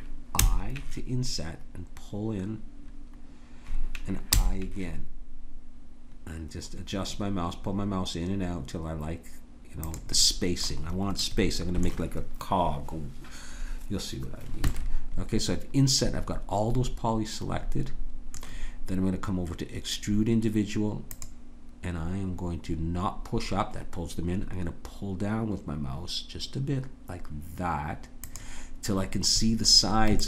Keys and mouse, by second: 0.3 i, 10.2 middle click, 15.3 middle click, 21.2-25.2 drag, 29.7-30.2 middle drag.